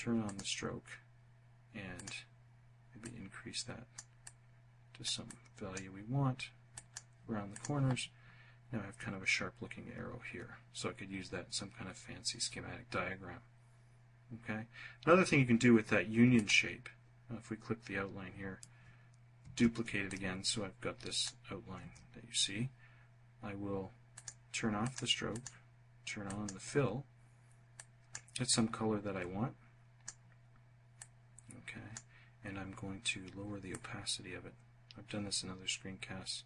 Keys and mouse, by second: 0.9 click, 2.0-3.0 drag, 3.2 click, 4.2 click, 5.7 click, 6.5 click, 15.3 click, 18.4 ctrl+d, 20.7 ctrl+z, 23.1 click, 23.8 click, 24.3 click, 25.2 click, 26.7 click, 27.4-29.1 drag, 29.9-31.0 drag, 32.6-34.2 drag.